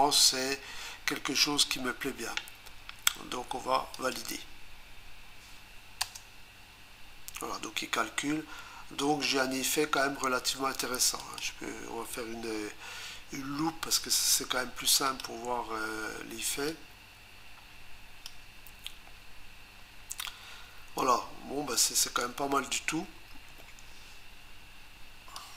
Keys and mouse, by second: 4.0 click, 6.0 Return, 11.2 click, 14.9 click, 15.1 click, 16.7 click, 25.4 click.